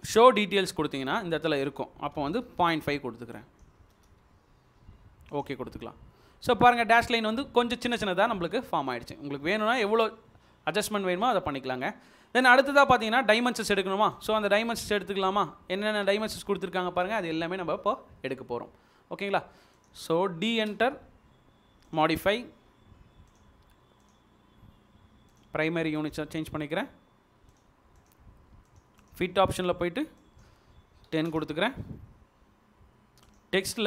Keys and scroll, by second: 2.2-2.6 typing, 4.2-4.5 typing, 20.5 d, 21.9 space, 31.1 typing.